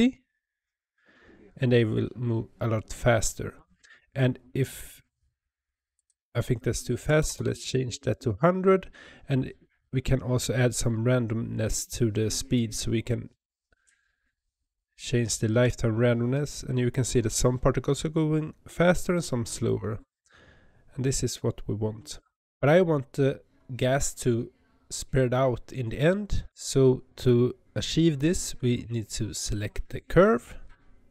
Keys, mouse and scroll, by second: 5.8-7.2 drag, 7.2 KP_0, 12.4-15.4 drag, 29.4 click.